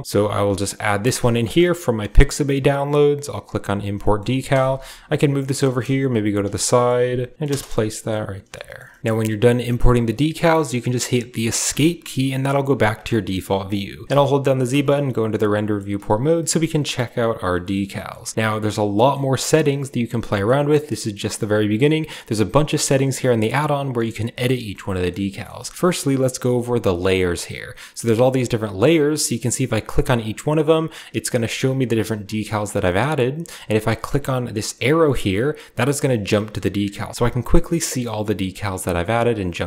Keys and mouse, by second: 3.3-11.6 middle drag, 4.5 KP_1, 5.8 KP_3, 12.9 shift+middle click, 13.2 click, 14.1 z, 15.4 drag, 15.7 a, 16.5 click, 17.4 drag, 17.8 click, 18.8 middle click, 19.9 middle click, 20.2 shift+middle click, 20.9 middle click, 24.1 shift+middle drag, 24.6 middle click, 25.1 middle click, 25.5 shift+middle click, 27.0-27.5 drag, 31.1 click, 32.6 click, 35.3 click, 36.8 click, 39.3 click.